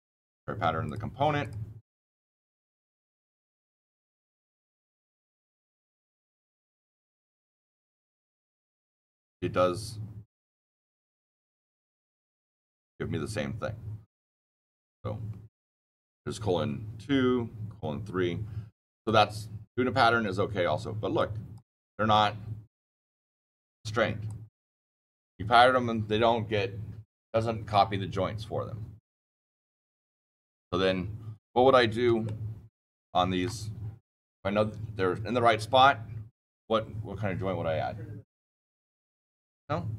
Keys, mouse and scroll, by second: 4.6 click, 6.1 click, 7.9 click, 10.3 click, 19.0 click, 21.1 click, 32.6 shift+middle click.